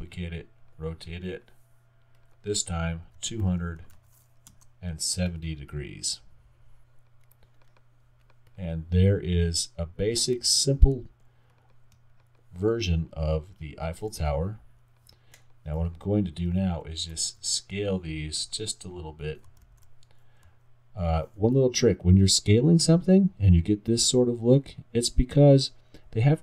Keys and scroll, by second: 4.5 Return, 17.0 alt+r, 19.7 super+z.